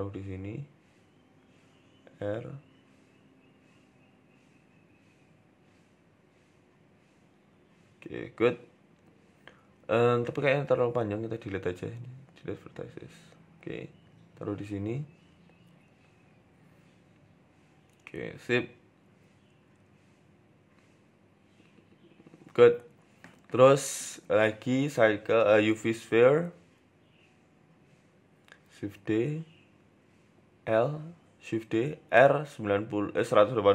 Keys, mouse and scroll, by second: 7.5 shift+middle click, 11.0 click, 12.0 Delete, 12.7 click, 13.3 click, 13.6 shift+middle click, 14.1 g, 15.9 click, 16.4 g, 19.1-19.8 scroll up 5, 19.3 shift+middle click, 20.0 g, 22.0-23.0 scroll down 5, 22.3 shift+middle click, 23.0 Tab, 23.4 Tab, 24.3 shift+a, 25.6 s, 28.1 shift+d, 31.2 shift+d, 32.0 r.